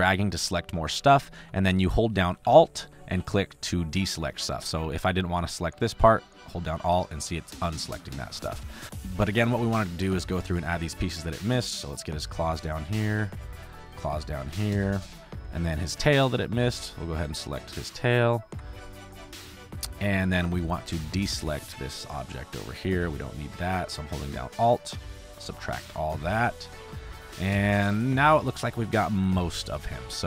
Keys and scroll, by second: 0.9 ctrl+z, 1.7 ctrl+z, 2.4 ctrl+z, 8.4 ctrl+z, 8.8 space, 12.4 space, 19.0 space, 27.0 space, 29.7 space.